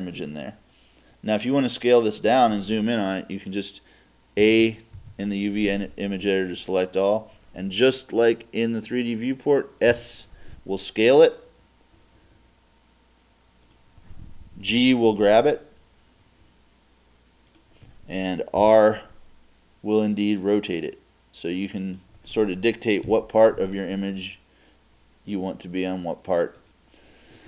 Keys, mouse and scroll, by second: 4.4 a, 5.0 a, 10.0 s, 14.7 click, 14.7 g, 18.6-19.4 drag, 18.6 r, 23.1 click, 23.1 g.